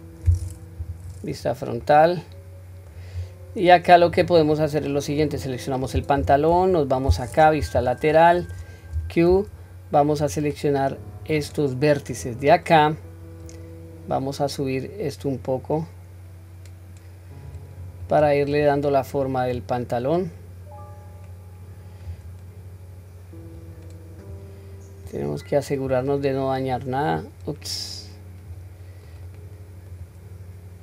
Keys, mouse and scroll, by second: 1.1 KP_1, 1.5-1.8 scroll down 1, 1.8-2.9 middle drag, 3.2-3.7 scroll up 1, 3.7-4.3 scroll up 4, 4.3 middle click, 5.2 click, 6.2 Tab, 6.7 middle click, 7.6 KP_3, 8.1 scroll up 1, 8.9 q, 10.2-12.2 drag, 13.5 click, 16.4-17.5 drag, 18.1 click, 19.5-22.1 drag, 23.6 click, 25.1 click, 26.7-28.5 drag, 29.1 click.